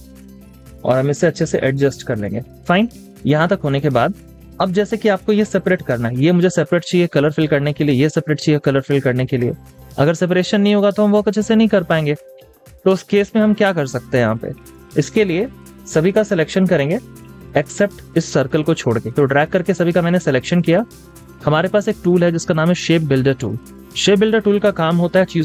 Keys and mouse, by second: 4.0 double click.